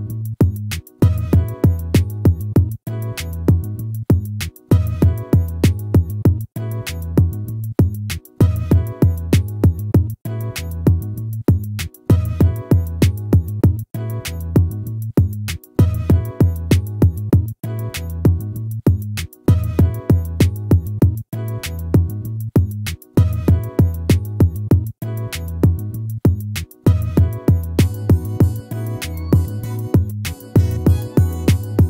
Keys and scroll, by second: 5.0 ctrl+-, 14.6 ctrl++.